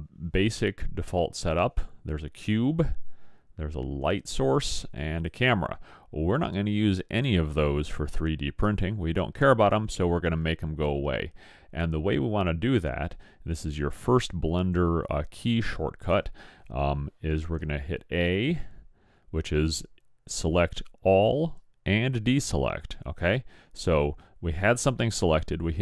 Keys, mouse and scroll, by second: 4.0-6.9 drag, 18.3 a.